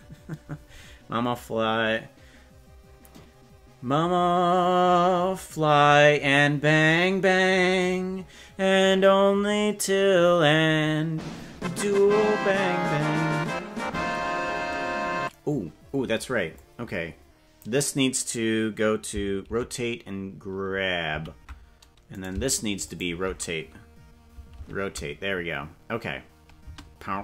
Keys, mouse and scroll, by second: 16.5-17.7 drag, 19.5 alt+r, 21.1 alt+g, 22.3 right click, 23.1 shift+right click, 24.7 alt+r, 26.7 space.